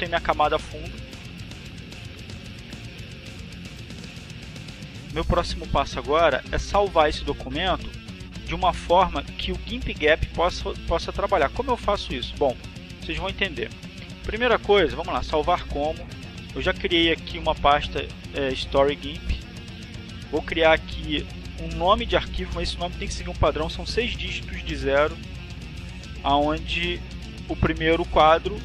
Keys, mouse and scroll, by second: 1.3 click, 12.7 click, 13.9 click, 18.2 click, 18.7 click, 23.4 o, 24.6 o, 25.8 1.